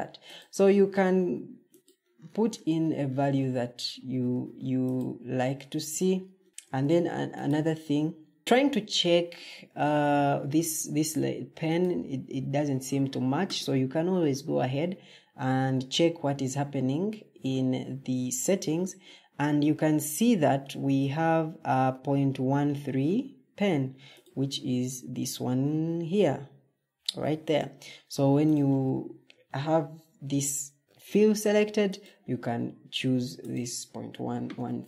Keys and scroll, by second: 6.4 Escape, 8.4 ctrl+z, 34.2 Escape.